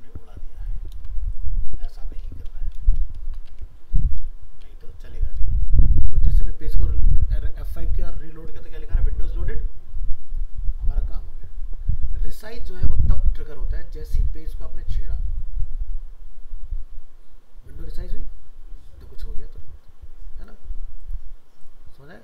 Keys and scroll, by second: 0.9 ctrl+c, 1.9 ctrl+v, 3.5 alt+Tab.